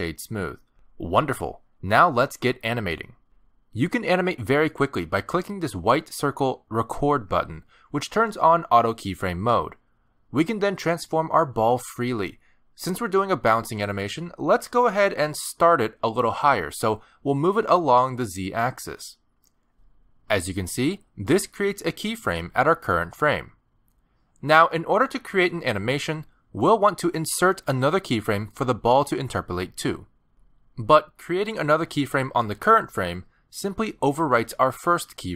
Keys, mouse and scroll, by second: 2.6-3.0 scroll up 4, 3.3 middle click, 4.1 scroll down 1, 4.6 shift+middle click, 5.5 scroll down 1, 5.7 middle click, 9.8 click, 12.3 middle click, 12.6 g, 14.8 scroll down 2, 15.3 shift+middle click, 15.5 middle click, 16.3 g, 18.4 shift+middle click, 18.8 middle click, 21.5 middle click, 34.8 g.